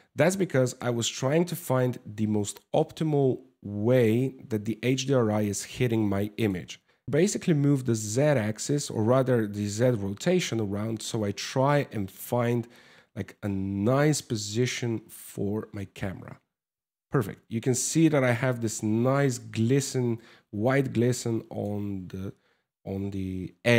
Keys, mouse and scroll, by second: 6.9 click.